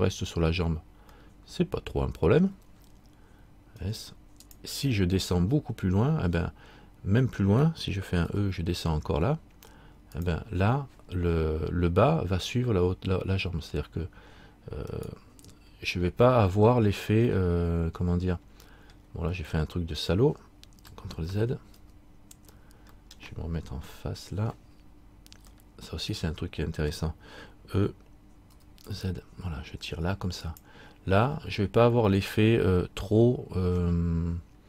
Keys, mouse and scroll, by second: 1.4 middle click, 4.0 s, 5.1-7.1 scroll down 1, 8.4 e, 15.1 right click, 16.2 middle click, 17.5 middle click, 21.5 ctrl+z, 22.6 ctrl+z, 24.0 KP_3, 25.7 shift+middle click, 28.7 e, 34.1 middle click.